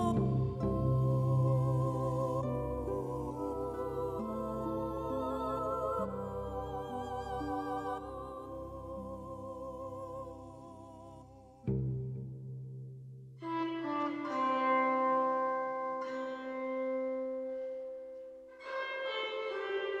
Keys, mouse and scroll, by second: 3.7 shift+middle click, 4.9-10.6 middle drag, 10.7-14.7 middle drag, 16.4-18.0 drag, 18.0-19.0 middle drag, 19.0-20.0 drag.